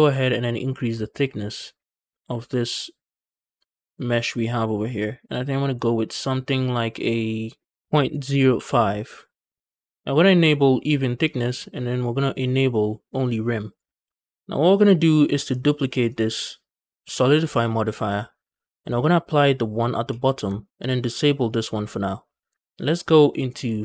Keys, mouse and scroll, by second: 0.7-4.2 shift+drag, 5.9 click, 7.7-9.6 drag, 9.6 shift+middle click, 9.6 scroll down 3, 10.0 middle click, 11.2 click, 13.6 click, 14.0 shift+middle drag, 15.8-18.0 drag, 18.3-18.9 scroll down 5, 19.9 ctrl+a, 21.2 click.